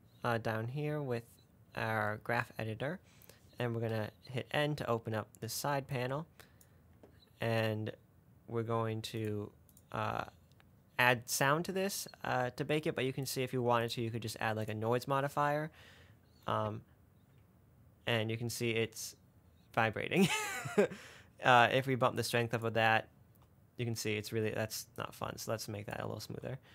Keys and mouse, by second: 4.2 n, 6.3 click, 9.5 click, 13.5 click, 14.1-16.0 drag, 16.7 space, 20.4 space, 22.0 click, 23.7 space, 24.6 space, 25.3 click, 26.5 space.